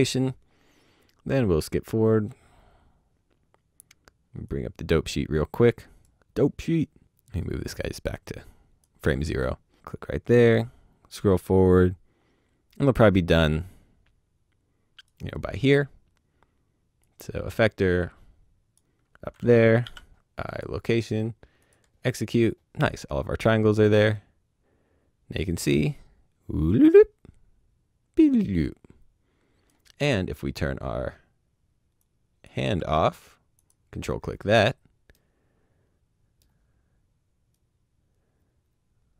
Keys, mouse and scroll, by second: 1.2 click, 1.3 right click, 4.4 click, 6.3 click, 8.9 click, 10.5 right click, 17.0 click, 20.4 click, 23.8 right click, 31.9 click, 35.1 middle click, 37.5 right click.